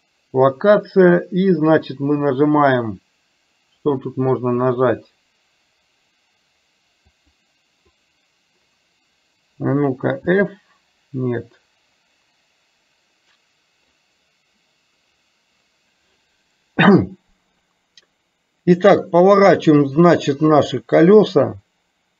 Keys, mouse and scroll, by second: 7.2 click, 10.3 f, 20.1-22.1 drag.